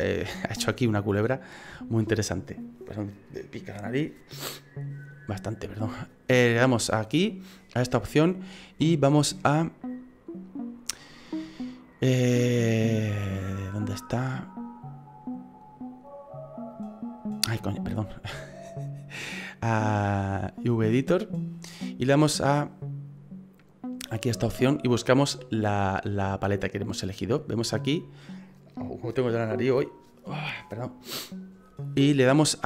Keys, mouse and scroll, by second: 6.1 click, 18.3 click, 24.1 click, 27.7 click.